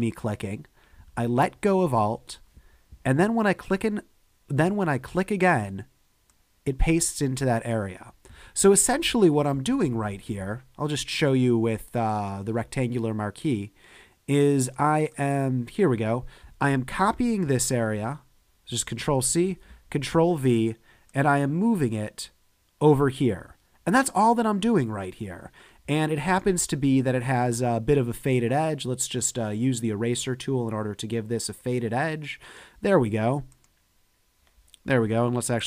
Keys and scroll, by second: 9.8 super+z, 17.5 super+c, 19.3 super+v.